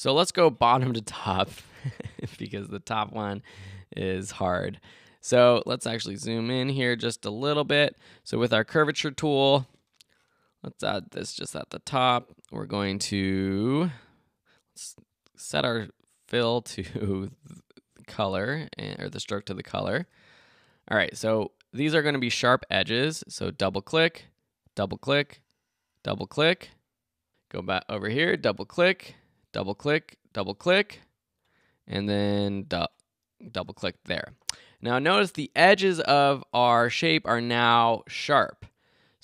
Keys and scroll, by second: 20.1 super+Tab.